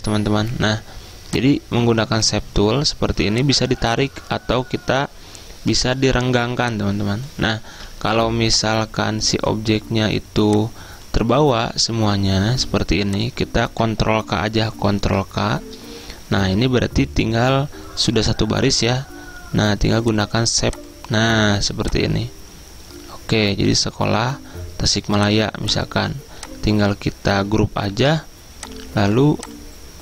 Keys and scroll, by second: 7.7 ctrl+z, 11.6 ctrl+z, 15.0 ctrl+k, 28.0 ctrl+g.